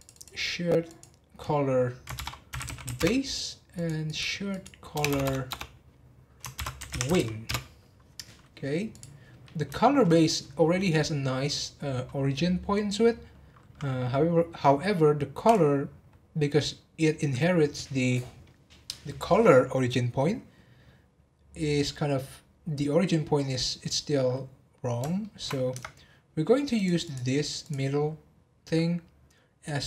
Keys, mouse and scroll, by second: 0.1-3.2 drag, 3.7 click, 4.0-5.1 drag, 5.1 BackSpace, 5.2 BackSpace, 8.9 click, 9.7-10.1 shift+middle drag, 10.1 scroll up 2, 15.4 click, 21.1-21.4 scroll down 2, 21.9-22.4 scroll up 2, 25.2-25.7 shift+middle drag, 25.7 Tab, 26.7 click, 27.6 click.